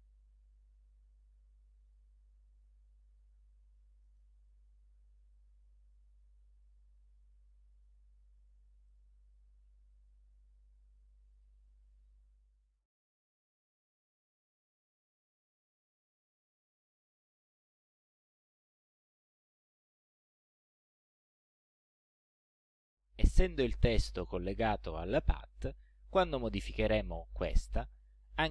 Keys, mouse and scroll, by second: 1.9 click, 2.5 shift+click, 4.0 click, 4.3 middle click, 6.0 click, 7.2 ctrl+scroll up 2, 8.9 click, 9.9 ctrl+scroll down 2, 11.3 ctrl+click, 12.8 click, 15.5-16.8 drag, 19.2 click, 22.4 click, 24.2-26.0 drag.